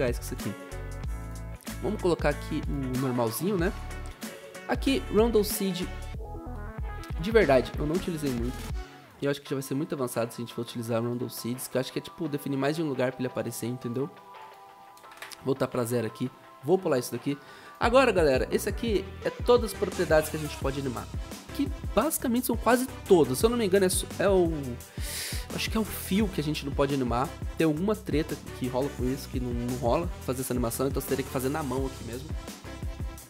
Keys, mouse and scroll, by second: 9.1 2, 15.1 Return.